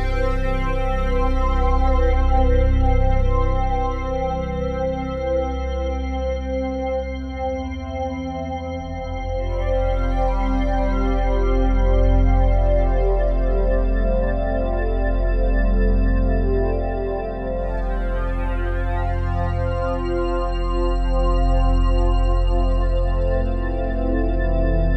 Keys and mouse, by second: 0.7-2.3 alt+shift+drag, 2.5 alt+shift+click, 3.0 ctrl+alt+click, 3.9 alt+click, 5.0 click, 6.6-7.0 typing, 8.5 click, 9.6 click, 10.6 click, 12.0-12.4 typing, 14.1 click, 15.0 alt+shift+click, 15.8 click, 16.0 shift+click, 17.8 ctrl+alt+click, 18.5-20.8 alt+shift+drag, 21.8-22.1 typing, 23.9 click.